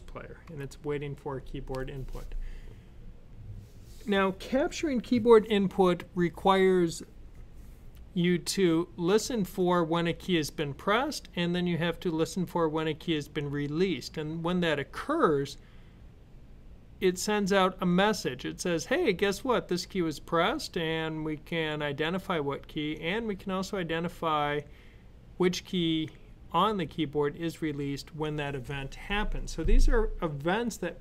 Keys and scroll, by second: 0.3 w.